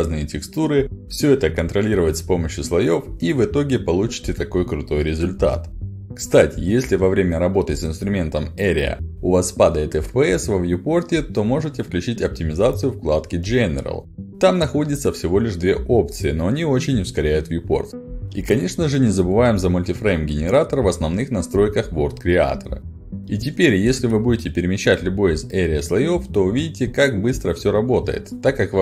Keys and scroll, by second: 1.1 e, 3.4-4.3 typing, 7.4 w, 8.4 s, 17.1 ctrl+alt+d, 26.0 w.